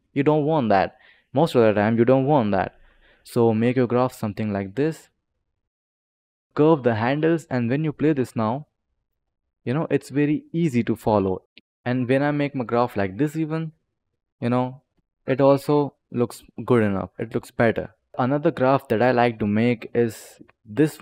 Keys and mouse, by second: 3.0 click, 4.9 click, 7.3 click, 7.9 space, 11.4 click, 13.0 click, 14.4 click, 14.8 space, 18.0 click, 18.1 click, 19.4 click.